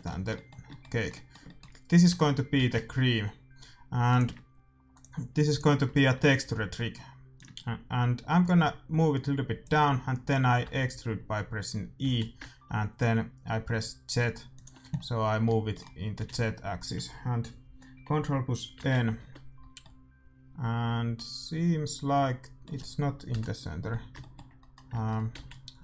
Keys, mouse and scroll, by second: 2.0 Tab, 2.5 s, 4.8-6.8 drag, 5.8-9.5 middle drag, 7.3-9.5 drag, 10.6 e, 14.9-15.4 scroll down 1, 15.4 middle click, 16.1 a, 16.3 a, 18.7 ctrl+n, 19.1 Tab, 24.1-25.8 middle drag, 24.8 Tab, 25.3 z.